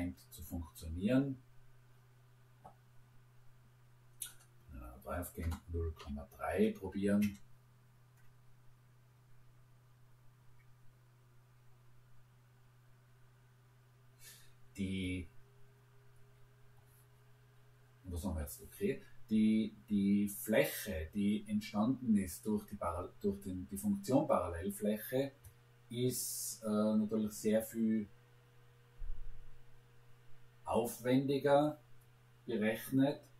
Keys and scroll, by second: 5.4 0, 6.0 ., 7.2 Return, 16.1 Return.